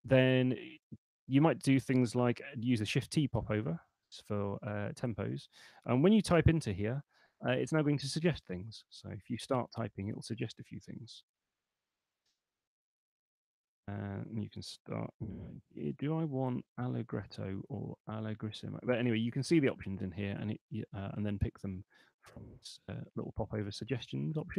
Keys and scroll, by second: 2.9 shift+t, 6.3 shift+a, 6.7 l, 9.8 BackSpace, 11.3 shift+m, 11.7 o, 14.6-16.6 typing, 21.4 Down, 22.3 Up, 24.3 Escape.